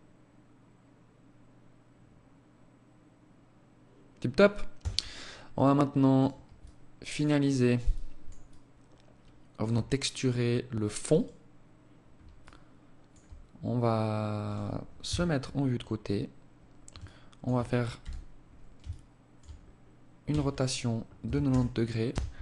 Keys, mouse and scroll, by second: 3.8 Escape, 4.6 right click, 5.2 right click, 5.7 alt+click, 6.3 alt+click, 6.9 alt+shift+click, 7.5 alt+click, 9.1-10.2 scroll up 6, 10.2 right click, 11.5 alt+click, 14.1 KP_3, 16.1 alt+shift+click, 17.0 n, 17.9 alt+shift+click, 18.7 scroll down 2, 19.3 r.